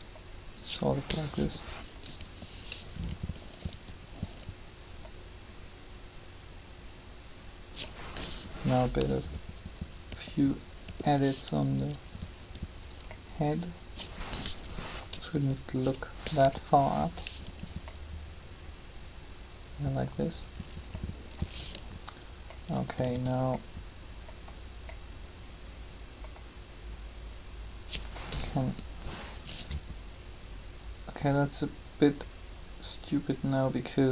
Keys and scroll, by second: 1.2 7, 8.2 3, 15.3 r, 22.8 typing, 28.5 3.